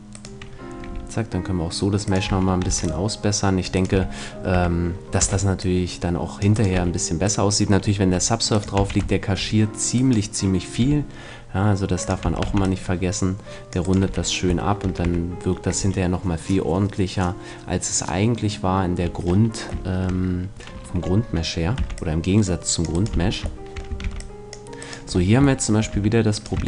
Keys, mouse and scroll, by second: 0.8 g, 2.1-4.0 drag, 2.3 a, 2.6 c, 3.8 middle click, 3.8-5.7 right drag, 3.9 f, 4.5 a, 5.2 c, 6.6-9.2 right drag, 6.8 f, 8.1 g, 8.7-10.6 drag, 8.8 a, 9.0-11.2 middle drag, 10.0-11.9 right drag, 10.8 g, 12.0-13.8 drag, 12.2 a, 12.4 c, 14.0 right click, 14.0 f, 15.0 a, 19.2-21.8 middle drag, 21.8 c, 23.0 right click, 23.1 f, 23.6-25.0 middle drag, 23.9 a, 24.0 c, 25.2 middle click, 25.9 a.